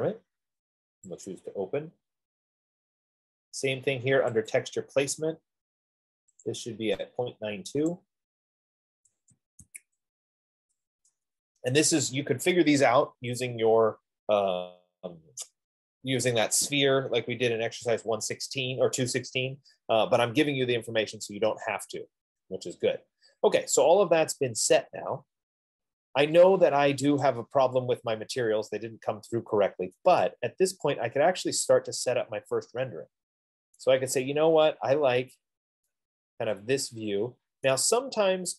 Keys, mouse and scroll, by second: 0.0 click, 1.6 click, 5.0 click, 6.8 click, 8.5 click, 9.2-10.0 typing, 11.3 Tab, 21.9 F15, 27.8-32.6 drag, 34.0 right click, 35.2 scroll, 37.8 right click.